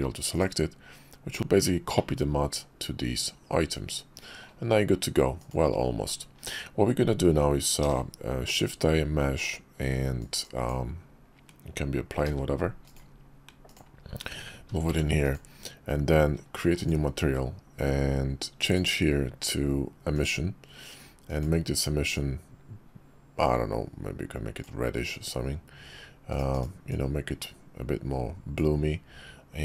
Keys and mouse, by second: 0.3 click, 2.0 click, 2.7-4.4 middle drag, 5.4 click, 7.8 shift+a, 10.5 click, 12.3 g, 14.9 g, 16.8 click, 18.6-20.3 drag, 21.3 click, 26.5 click, 26.9-28.6 drag.